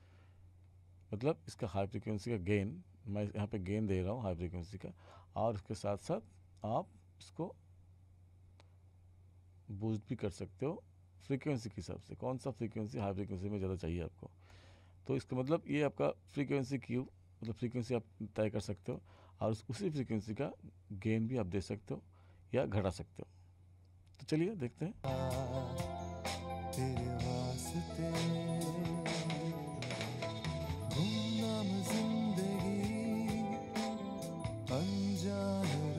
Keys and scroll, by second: 25.0 space.